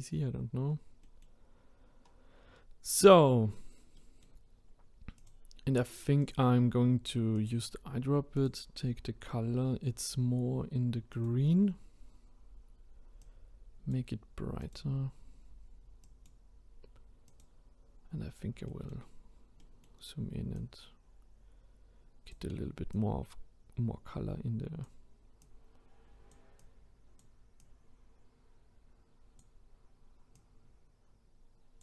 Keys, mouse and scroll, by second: 0.6-1.0 scroll down 1, 1.0 middle click, 1.6-2.0 scroll up 1, 2.0-2.5 scroll down 2, 2.5-2.9 scroll up 1, 3.0 middle click, 3.5-4.0 scroll up 2, 4.0-5.2 middle drag, 5.2 click, 8.3 click, 18.2 scroll up 1, 18.7 middle click, 19.0-19.6 scroll up 1, 19.6-20.5 middle drag, 20.5-31.8 drag.